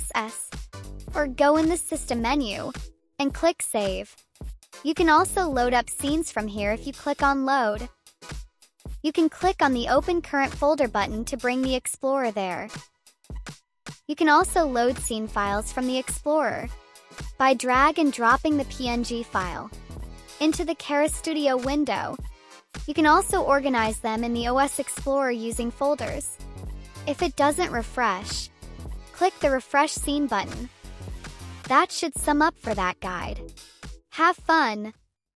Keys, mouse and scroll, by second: 1.8 click, 3.0 click, 5.0 click, 6.3 click, 6.8 click, 9.7 click, 10.6 click, 10.9 click, 13.7 click, 16.2-19.0 drag, 20.0-22.6 drag, 22.8 right click, 23.9 click, 24.2-25.2 typing, 25.2 click, 25.9 click, 26.4 click, 27.0 click, 27.6 click, 27.9 click, 33.1 click, 33.5 click.